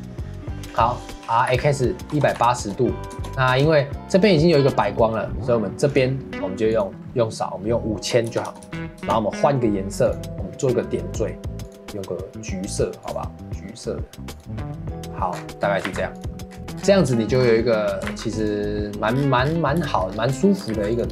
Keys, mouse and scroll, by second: 1.2 r, 3.3 scroll up 3, 3.5 KP_0, 5.9 click, 6.7-8.5 drag, 8.5 KP_0, 10.0 click, 15.3-15.9 scroll up 7, 15.9 ctrl+s, 16.5 scroll down 2, 16.6 ctrl+s, 16.8-17.2 scroll up 3, 17.2 shift+middle drag, 17.4 scroll up 5, 18.1 ctrl+s, 19.1-19.6 scroll down 12, 19.9 shift+middle drag, 20.1 scroll up 4, 20.4 shift+middle click, 20.7 ctrl+s.